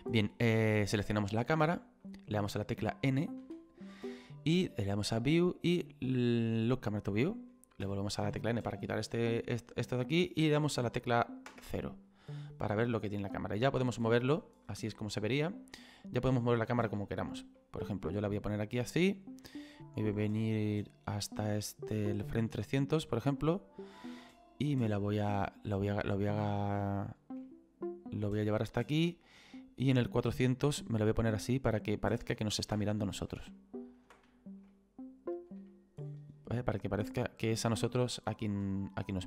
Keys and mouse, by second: 1.6 click, 5.2 click, 7.0 click, 7.9 n, 11.5 KP_0, 17.6 shift+middle click, 19.8 click, 24.4 shift+middle click, 26.7 shift+middle click, 29.5 click, 31.2 middle click, 32.4 ctrl+middle click, 32.9 shift+middle click, 33.5 ctrl+middle click, 34.7 middle click, 35.7 shift+middle click, 38.2 click.